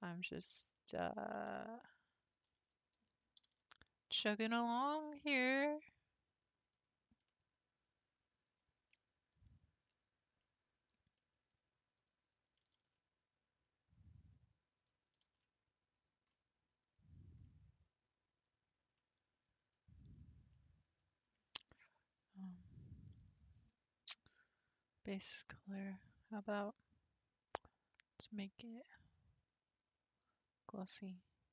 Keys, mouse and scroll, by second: 0.6-2.3 middle drag, 2.3 alt+click, 3.4 g, 4.7-6.8 middle drag, 6.8-7.3 scroll down 3, 7.3-12.2 middle drag, 12.2 click, 12.6 g, 14.8 click, 15.2 g, 16.3-17.1 middle drag, 17.1 scroll down 3, 17.4-18.5 middle drag, 18.5-19.0 scroll up 2, 19.0-19.9 middle drag, 19.9 scroll down 2, 20.2 Tab, 20.5-22.2 middle drag, 22.2 click, 26.2-29.3 drag.